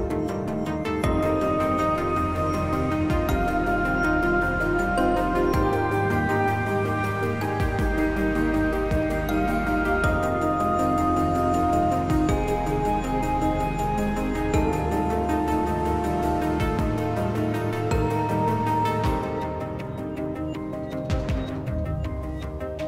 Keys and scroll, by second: 0.6 s, 1.4 4, 20.8 s.